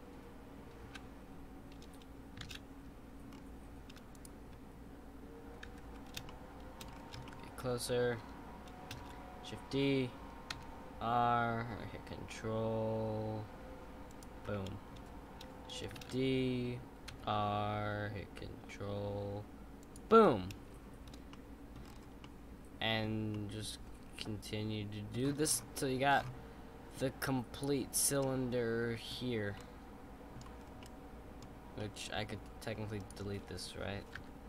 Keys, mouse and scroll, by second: 0.8 ctrl+z, 2.4 shift+d, 5.7 ctrl+z, 6.3-6.9 shift+middle drag, 6.9-7.2 scroll up 2, 7.2-9.0 shift+middle drag, 9.0 shift+d, 16.0 shift+d, 21.3-21.8 middle drag, 21.8-22.2 scroll down 6, 22.2-25.4 middle drag, 25.4-27.5 scroll down 7, 27.5 click, 28.2-30.6 middle drag, 30.6 scroll up 2, 30.8-31.5 middle drag, 31.5 scroll up 1, 31.8-33.0 middle drag, 33.0 click, 34.1 x.